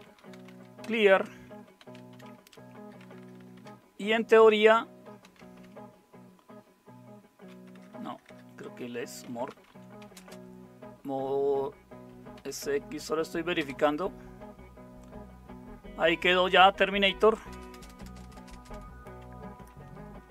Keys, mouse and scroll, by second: 0.0-3.5 typing, 5.0-6.1 typing, 7.7-10.7 typing, 12.1-12.9 typing, 13.6 Tab, 17.5-18.5 typing, 19.7-20.3 typing.